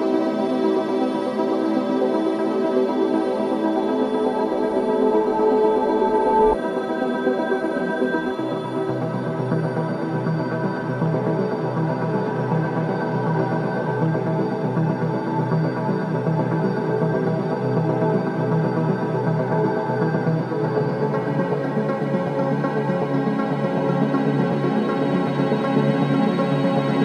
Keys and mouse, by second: 2.2 g, 2.6 z, 5.6-8.1 drag, 8.1 e, 13.4 click, 14.1 click, 15.4 g, 16.3 click, 18.9-23.8 alt+drag, 24.1 click, 24.4 Tab.